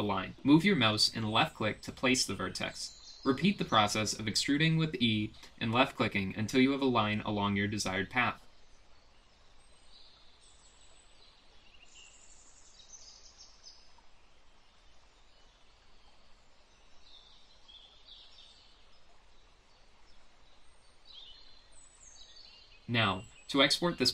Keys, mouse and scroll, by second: 2.3 e, 6.2-14.4 typing, 9.4 click, 12.5 click, 13.2 click, 14.3 click, 15.1 click, 15.6 click, 16.2 click, 16.5 g, 16.8 g, 17.3 middle click, 17.3 click, 17.5 g, 18.0 click, 18.1 g, 18.9 click, 19.1 middle click, 19.3 middle click, 19.3 click, 19.5 middle click, 19.8 click, 20.1 g, 20.6 click, 20.7 g, 21.2 click, 21.5 g, 21.9 click, 22.2 click, 22.6 click, 22.7 g, 23.0 click, 23.2 g, 23.8 click, 24.0 middle click.